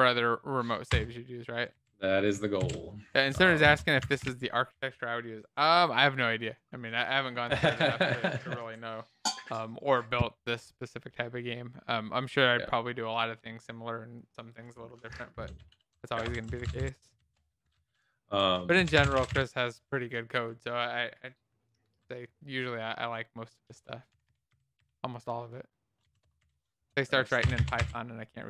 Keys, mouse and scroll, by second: 0.8 Return, 2.1 ctrl+s, 2.5 ctrl+b, 3.3 Down, 3.6 Down, 4.4 ctrl+s, 4.4 Up, 4.7 End, 4.8 Return, 16.2 Up, 16.4 Right, 16.6 Right, 16.7 Right, 17.1 ctrl+shift+Left, 18.7-19.8 typing, 19.8 Down, 20.0 Down, 20.4 Tab, 22.8-25.2 typing, 26.0 Down, 26.1 Return, 26.3-28.3 typing, 28.4 Down.